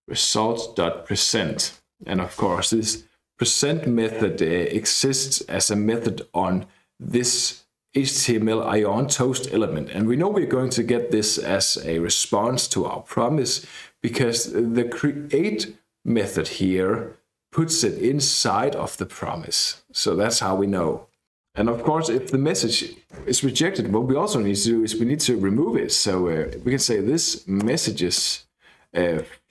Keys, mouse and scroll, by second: 0.0-2.7 typing, 1.3 Return, 22.2-22.5 scroll up 1, 23.2 KP_Enter, 25.4-29.5 typing.